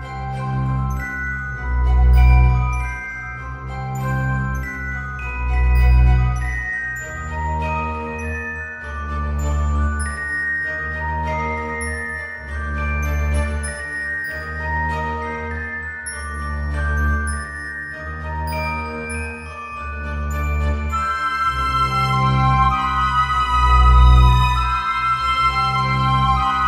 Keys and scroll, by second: 7.1 ctrl+z.